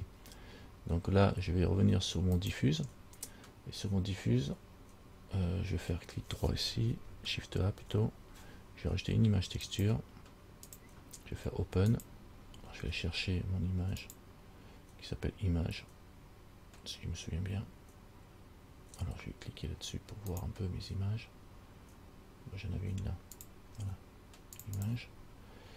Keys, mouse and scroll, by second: 2.6 click, 7.8 shift+a, 12.1 click, 25.0 click.